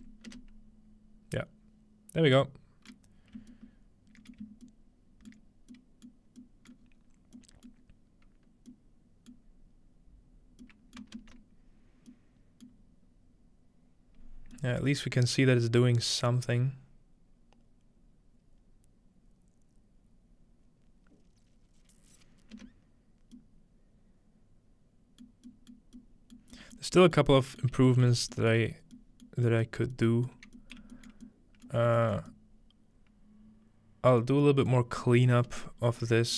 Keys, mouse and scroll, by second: 2.9 middle click, 4.3 shift+middle click, 5.3-5.7 shift+middle drag, 6.1 shift+middle click, 6.7-7.4 shift+middle drag, 6.8-8.4 scroll down 3, 7.7-8.7 middle drag, 9.3-10.6 middle drag, 10.9-12.1 ctrl+middle drag, 12.7-14.4 ctrl+middle drag, 15.2 middle click, 16.3-19.7 middle drag, 22.5 space, 25.2 middle drag, 25.7 middle drag, 26.4 middle click, 26.8 middle drag, 27.2-27.6 middle drag, 27.7 shift+middle click, 28.0 shift+middle click, 28.8 shift+middle click, 28.8-29.8 scroll down 1, 29.8 middle click, 29.8 scroll up 1, 30.4 middle click, 30.6 scroll up 1, 30.8 shift+middle click, 31.1 shift+middle drag, 31.9 shift+middle click, 34.2 middle drag, 35.0 middle drag, 35.5-36.0 middle drag, 35.5 space.